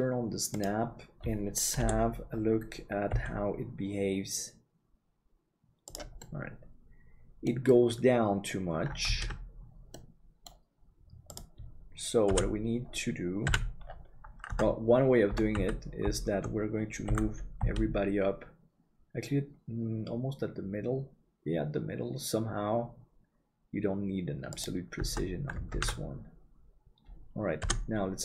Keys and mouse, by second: 1.7 KP_7, 3.2 g, 6.3-8.8 middle drag, 9.4 ctrl+z, 9.9 middle click, 12.3 KP_Divide, 13.5 KP_3, 14.5 Tab, 15.5 a, 17.0 g, 25.0 Tab, 25.9 ctrl+s.